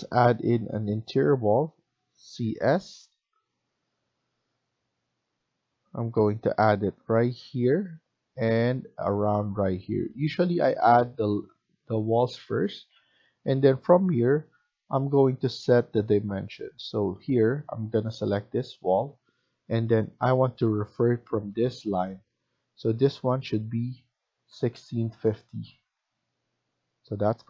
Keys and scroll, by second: 2.2 typing, 4.1-4.8 typing, 10.9 Escape, 11.2 Escape, 11.4 Escape, 24.2-25.7 typing, 25.8 Return.